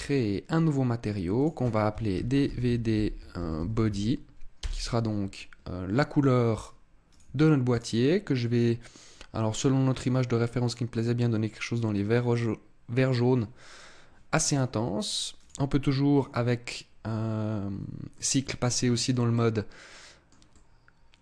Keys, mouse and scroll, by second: 1.3 click, 7.0 click, 7.7 click, 14.5 scroll up 2, 15.3 click, 18.1 middle click, 19.3 middle click, 20.4 middle click.